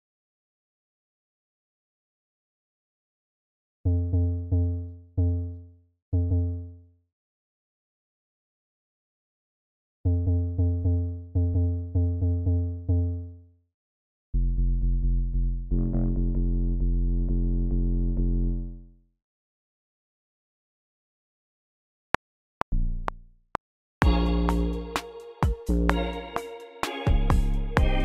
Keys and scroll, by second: 19.4-20.1 typing, 22.1 r.